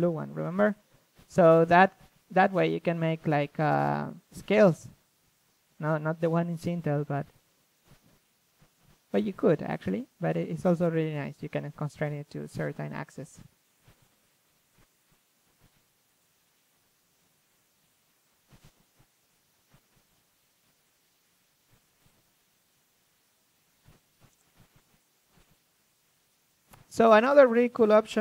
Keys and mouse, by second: 19.4-24.6 drag, 24.6-27.6 middle drag, 25.8-28.2 drag.